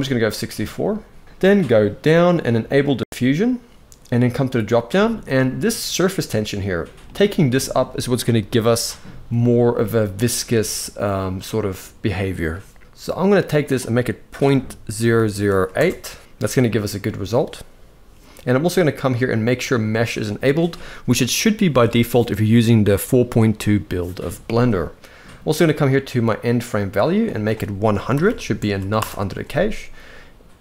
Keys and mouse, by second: 6.3 click, 13.1-15.8 drag, 14.8 0, 26.9-29.1 drag, 28.0 0.